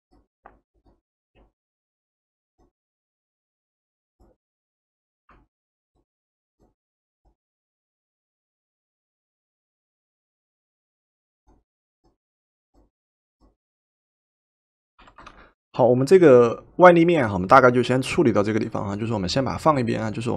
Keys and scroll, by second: 15.1 v.